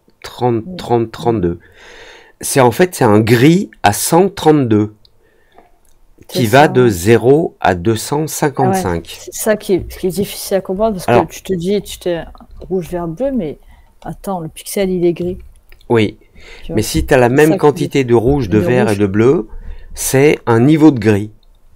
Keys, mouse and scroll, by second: 9.9-10.8 alt+scroll down 3, 10.8 alt+middle click, 11.0 alt+middle click, 11.4 alt+middle click, 11.7-13.0 alt+middle drag, 13.1-14.1 alt+scroll down 3, 14.3 alt+scroll up 1, 14.4-14.9 alt+scroll down 2.